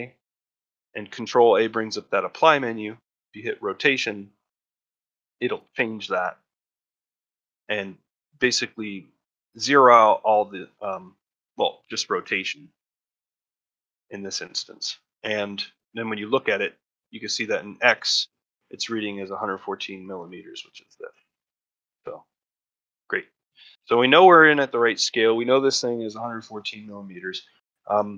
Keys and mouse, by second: 6.5 middle click, 7.1-7.4 shift+middle drag, 14.2 click, 15.5-18.7 drag, 20.0 middle drag, 21.4 middle drag, 21.7 shift+middle drag, 23.4 middle click, 23.7-24.0 shift+middle drag, 24.2 ctrl+middle drag, 24.5 shift+middle drag, 27.7 middle drag.